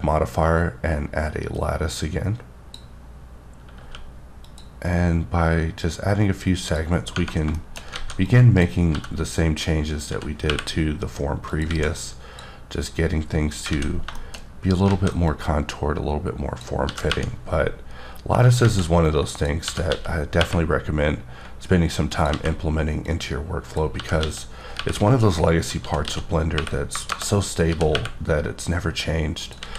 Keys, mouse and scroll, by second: 3.8 q, 4.4 click, 6.7 click, 7.5 shift+middle click, 7.9 alt+a, 8.3 click, 10.1 x, 10.5 y, 11.5 click, 11.7 alt+a, 12.0 click, 13.7 alt+a, 14.2 shift+middle click, 14.9 alt+a, 15.3 click, 17.1 g, 18.4 click, 18.6 alt+a, 19.1 click, 19.7 g, 19.9 x, 20.4 y, 22.1 click, 22.3 alt+a, 23.1 click, 24.0-27.9 typing, 25.2 click, 27.1 KP_Enter, 29.4 click, 29.6 alt+a.